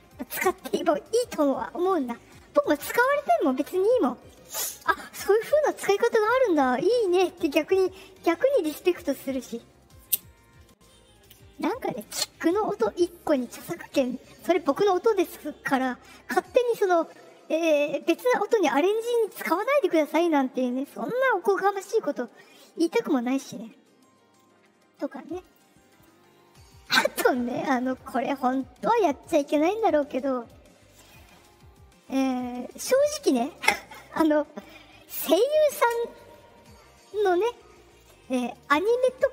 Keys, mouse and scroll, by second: 25.4 click, 31.9 click, 34.5 click.